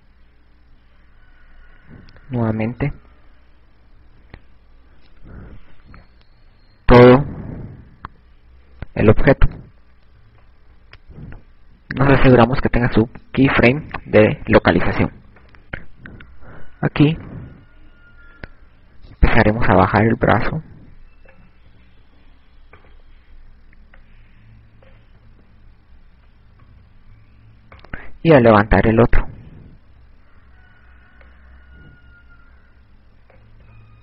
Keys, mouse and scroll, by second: 6.2 ctrl+Tab, 10.4 ctrl+Tab, 12.5 i, 16.8 ctrl+Tab, 19.3 right click, 22.2 click, 23.4 i, 24.5 right click, 25.9 click, 27.0 i, 28.1 KP_6, 28.5 KP_6, 29.4 right click, 30.6 KP_3, 31.7 KP_1, 33.2 click.